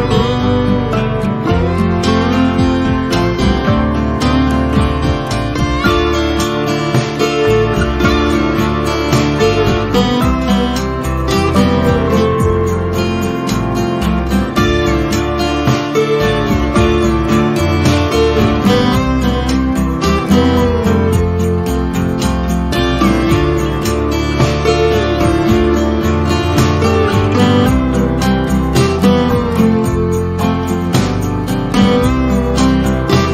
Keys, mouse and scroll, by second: 2.3 F1, 3.1-4.0 click, 4.2-5.5 typing, 4.4 click, 5.4-6.0 click, 5.8 F1, 6.0-7.7 drag, 9.6 F2, 10.3-11.5 drag, 14.8 ctrl+scroll down 1, 16.3 shift+right click, 16.8 z, 17.1 click, 17.4 F1, 19.2-20.1 click, 20.4 shift+right click, 21.2 F1, 22.6-23.5 drag, 27.6 shift+right click, 28.4 F1, 28.8 ctrl+scroll down 1, 29.9-31.1 drag, 31.5-32.6 typing, 32.4 click, 32.8 F1, 33.0 click.